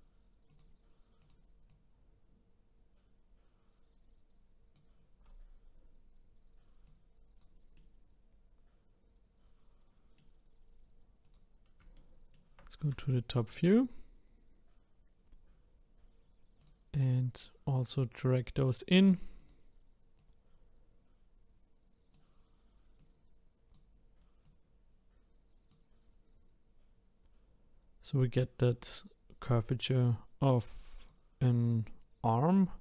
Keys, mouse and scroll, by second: 0.5 click, 1.2 click, 1.7 click, 6.8 click, 7.7-10.8 middle drag, 11.2 click, 11.9-16.0 shift+middle drag, 16.6-17.8 drag, 19.4 click, 20.2 click, 23.0-24.5 drag, 30.7 click, 31.5 click.